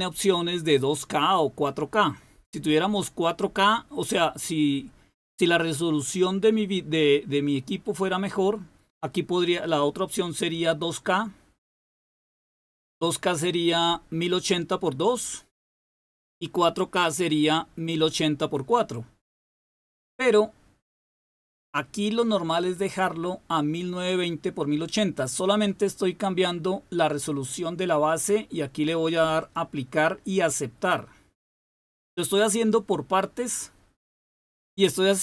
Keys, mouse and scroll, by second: 21.1 click, 22.8 click, 29.4 click, 32.7 click.